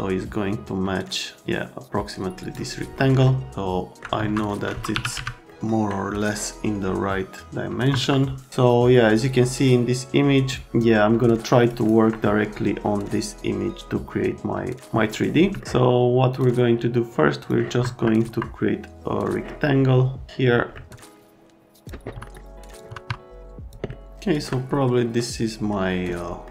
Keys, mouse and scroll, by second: 0.9 middle click, 3.2 alt+middle click, 4.2 F3, 4.7-5.6 typing, 5.4 right click, 6.2 click, 7.9 F3, 10.7 alt+middle click, 15.6 alt+middle click, 16.3 click, 17.4 click, 17.8 F3, 18.2 F3, 19.2 click, 20.7 alt+middle click, 20.9 F3, 21.2 click, 22.1 F3, 22.2 middle click, 22.8 click, 22.9 F3, 23.1 F3, 23.9 alt+middle click, 25.0 middle click.